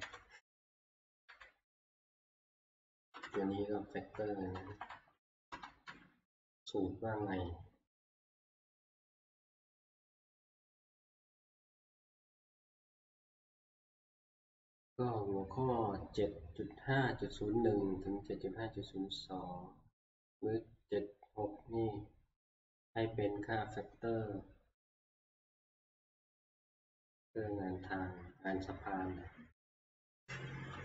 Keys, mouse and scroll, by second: 0.0 ctrl+Page_Down, 1.3 click, 3.3-4.1 Left, 4.7 Right, 4.9 Right, 5.1 Right, 5.3 Right, 11.3 shift+F2.